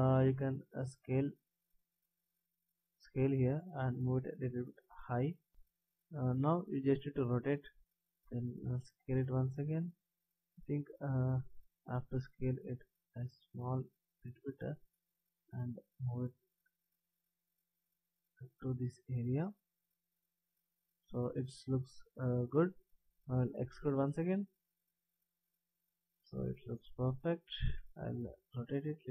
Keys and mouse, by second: 0.1 s, 3.1-5.1 drag, 7.3 r, 8.8 s, 10.0-13.1 drag, 12.5 s, 15.5-19.1 drag, 23.9 e, 27.8 r.